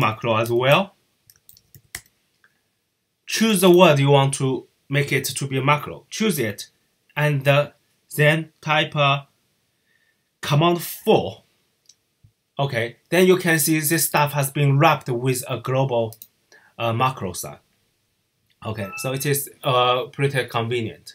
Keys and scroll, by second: 0.0-2.3 typing, 10.8 super+4.